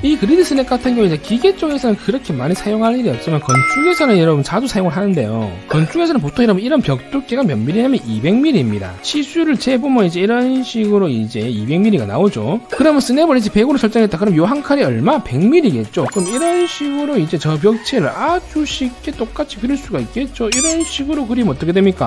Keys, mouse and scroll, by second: 9.0 w, 9.1 right click, 9.9 click, 10.2 scroll up 1, 10.8 click, 11.8 click, 13.5 scroll up 1, 14.7 scroll down 1, 15.7 scroll up 1, 16.0 scroll down 1, 16.3 1, 16.6 right click, 17.0 right click, 17.5 right click, 18.4 right click, 19.5 right click, 19.9 right click, 20.7 right click, 22.0 click.